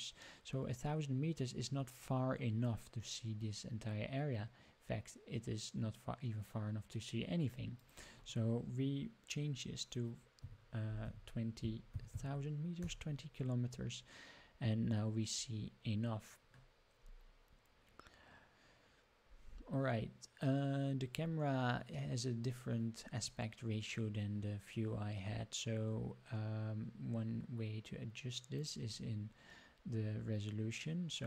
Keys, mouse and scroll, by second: 7.7-13.9 drag, 11.9 KP_0, 15.3-15.7 scroll up 2, 18.3 scroll up 1, 19.5 scroll down 1, 28.5 click.